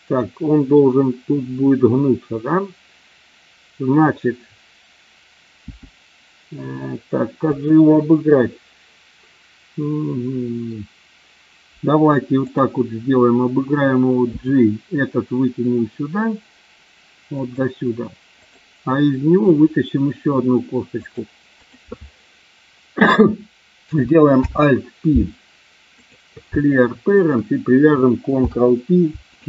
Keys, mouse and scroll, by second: 5.8 g, 7.6 click, 12.4 click, 14.4 g, 17.3 click, 18.3 click, 19.4 e, 21.0 click, 21.5 click, 24.4 alt+p, 27.1 shift+click, 28.3 ctrl+p.